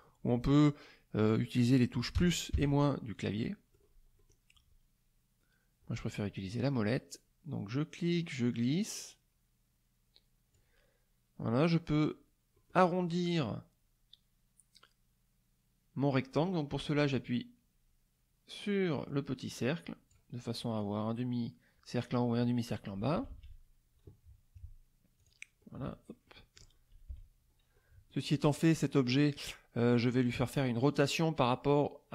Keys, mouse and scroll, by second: 2.1 KP_Add, 2.5 KP_Subtract, 3.4 middle click, 4.2 middle click, 8.1-10.7 drag, 12.5 middle click, 17.1-20.3 drag, 23.0 KP_Subtract, 25.2 click, 25.6-26.7 middle drag, 25.6-26.7 scroll down 1, 27.1 KP_Subtract, 27.7 middle click, 27.7-28.3 scroll down 1.